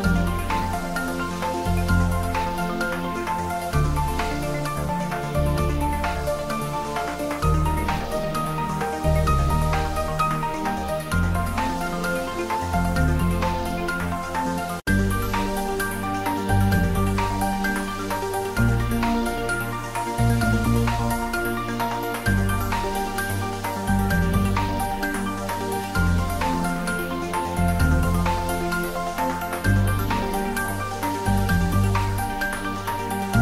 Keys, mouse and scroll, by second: 0.3 click, 1.2 Tab, 1.7 ctrl+middle click, 2.3 Tab, 2.5 ctrl+middle click, 3.3 ctrl+b, 5.3 click, 5.6 ctrl+z, 7.2 Tab, 7.8 ctrl+a, 8.3 click, 8.7 Tab, 9.2 ctrl+b, 10.8 click, 11.1 ctrl+z, 11.6 click, 12.2 ctrl+z, 13.3 Tab, 13.9 middle click, 14.9 Tab, 15.6 ctrl+r, 15.8 click, 16.7 Tab, 17.0 ctrl+middle click, 17.4-19.2 middle drag, 19.2 ctrl+s, 19.6-21.1 middle drag, 21.1-22.4 ctrl+middle drag, 22.4 click, 22.9 ctrl+s, 23.1 ctrl+middle click, 23.7 click, 26.8 click, 27.6 shift+middle click, 28.1 ctrl+middle click, 28.7 shift+middle click, 29.4-31.3 middle drag, 31.5 click, 32.0-32.9 typing.